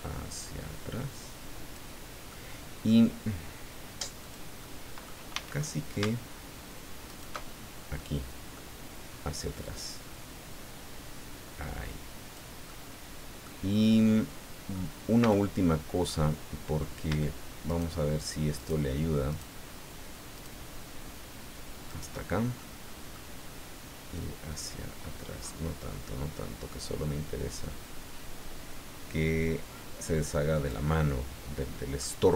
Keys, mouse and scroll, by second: 2.3 middle click, 4.2 click, 4.6 middle click, 5.3 a, 5.5-5.9 scroll down 1, 7.0 alt+shift+right click, 7.6-7.9 alt+shift+scroll down 3, 8.0 click, 9.6-12.5 drag, 12.7 middle click, 14.1 middle click, 15.2 a, 16.1 middle click, 17.6 shift+right click, 18.5 shift+right click, 19.3 shift+right click, 20.3 shift+right click, 21.9 shift+right click, 22.6 click, 24.1 click, 24.9-25.7 scroll up 2, 26.3 scroll down 1, 28.1-28.4 scroll down 2, 31.1-32.2 middle drag.